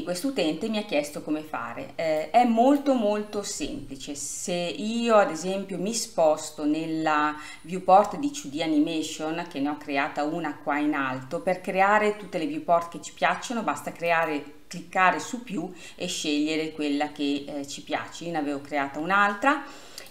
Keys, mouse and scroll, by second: 2.4-20.1 drag.